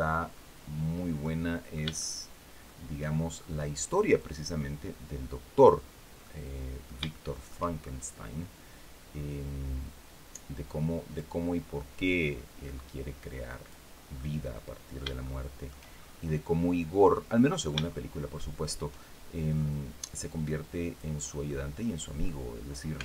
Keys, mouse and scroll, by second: 0.9 middle click, 3.8-5.5 drag, 5.6-5.9 scroll down 1, 5.9 middle click, 6.8 shift+middle click, 7.5-7.8 shift+scroll up 3, 9.0-11.0 drag, 11.7-13.5 drag, 13.5 scroll down 2, 13.9 middle click, 14.9 shift+middle click, 15.6-16.0 shift+scroll up 3, 16.8 middle click, 17.6 shift+middle click, 19.4-20.8 drag, 21.1 middle click, 22.2 scroll down 2, 22.9 alt+Tab.